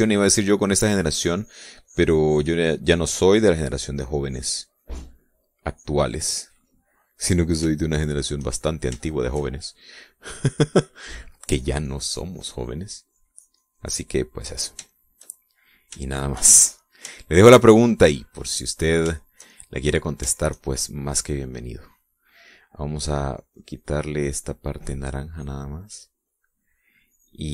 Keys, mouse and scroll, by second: 6.7 click, 7.7 middle click, 8.2 middle click, 8.9 shift+middle click, 9.4 shift+middle click, 10.1 shift+middle click, 11.0-12.5 drag, 15.5-21.3 shift+middle drag, 21.5 shift+middle click, 22.4 click, 24.3-27.5 drag.